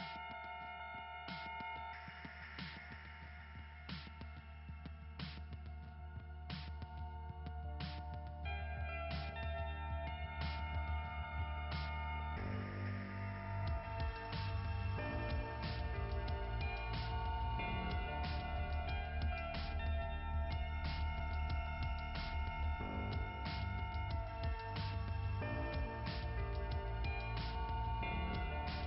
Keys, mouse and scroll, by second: 1.2 click, 2.8 scroll down 1, 4.3 click, 8.3 click, 9.9 click, 11.6 click, 12.0 click, 15.4 click, 16.2 click, 16.6 click, 18.8 click, 19.0 click, 20.8 click, 25.1 click, 25.9 click, 28.0-28.4 scroll down 2.